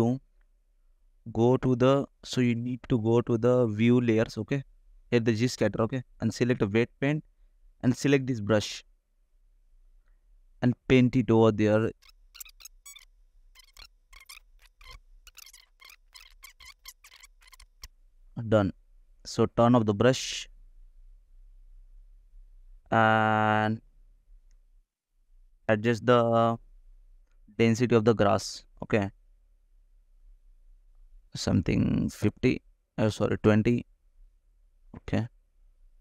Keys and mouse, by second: 2.5 shift+middle click, 5.3-6.4 drag, 6.4 right click, 7.4 click, 8.9 right click, 11.0 g, 11.5 f, 13.6 click, 14.0 click, 14.7 click, 16.1 click, 16.3 shift+middle click, 16.5 KP_0, 17.5 KP_0, 17.7 ctrl+s, 18.0 ctrl+s, 21.0 click, 23.0 shift+click, 27.8 click, 28.5 right click, 30.2-31.9 right drag, 33.1-36.0 right drag.